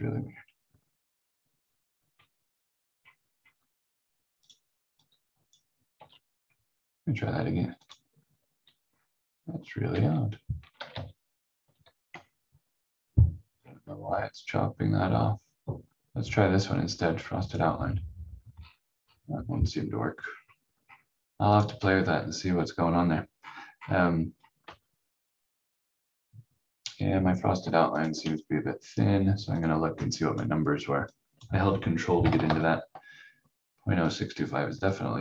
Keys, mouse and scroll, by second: 2.9 scroll up 1, 4.4 click, 5.9 ctrl+z, 7.8 click, 8.9 scroll down 1, 9.9 v, 10.9 ctrl+z, 12.4-13.5 scroll up 1, 17.4 click, 18.5-18.8 scroll down 1, 20.3 scroll up 1, 21.5 click, 23.3-24.2 scroll up 1, 24.2-24.6 scroll down 1, 24.6 v, 27.9 ctrl+click, 31.9-32.9 typing, 34.1 click.